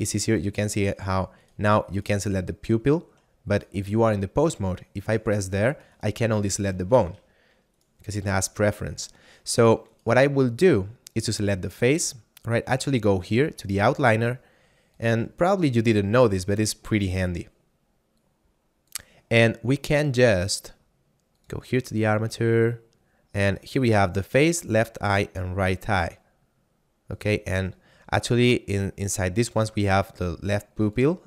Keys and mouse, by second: 4.0 ctrl+Tab, 5.1 right click, 6.9 ctrl+Tab, 7.6 right click, 12.9 click, 15.0 click, 18.1 click, 21.4 click, 27.1 click, 30.9 click.